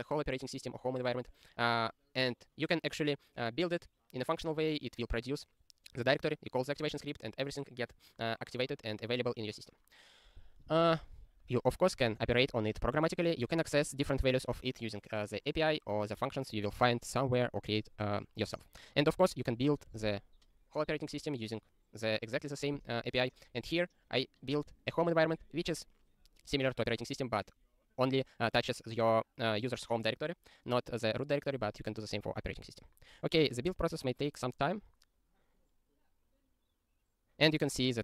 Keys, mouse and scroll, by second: 10.7 click, 12.3 ctrl+e, 19.0 ctrl+n, 19.1 ctrl+n, 19.2 ctrl+n, 19.3 ctrl+n, 19.5 ctrl+n, 35.5 ctrl+e.